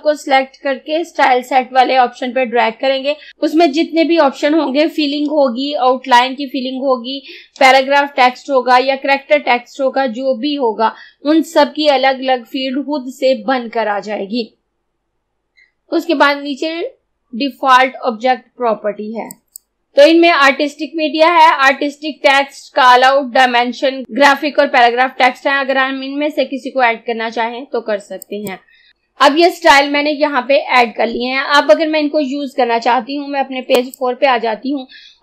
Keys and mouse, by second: 19.4 click, 28.3 click, 33.8 click.